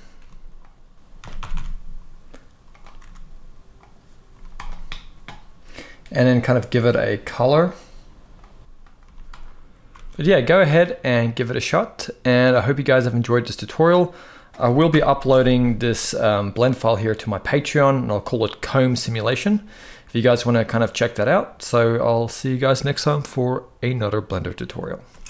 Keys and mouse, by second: 0.3 click, 0.9 s, 1.1 x, 1.2 x, 2.4 click, 2.7 r, 3.5-3.9 drag, 4.0 z, 6.1 click, 6.7-7.0 drag, 7.4-8.6 drag, 8.6 g, 8.7 z, 9.7 ctrl+s, 9.9 ctrl+s, 14.6 shift+Left, 14.9 space, 24.8 space, 25.2 ctrl+s.